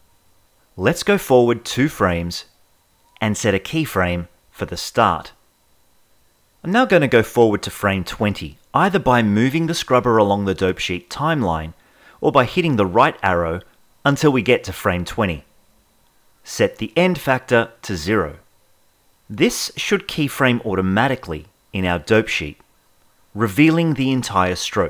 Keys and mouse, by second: 1.2-3.9 drag, 8.8-14.2 drag, 16.9-18.3 drag, 23.4 Right, 24.6 Right.